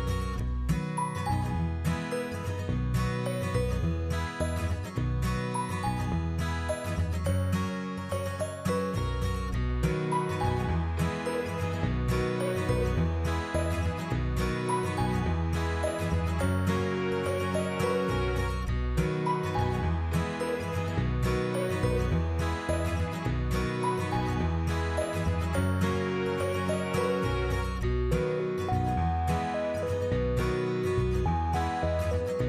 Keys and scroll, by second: 0.5 shift+k, 1.6 shift+g, 2.2 ctrl+a, 2.5 2, 2.6 space, 3.0 shift+k, 5.7 2, 6.1 5, 6.2 space, 6.6 shift+k, 8.3 ctrl+a, 8.8 5, 9.1 space, 9.5 shift+k, 21.8 Up, 24.2 Up, 29.2-31.8 typing.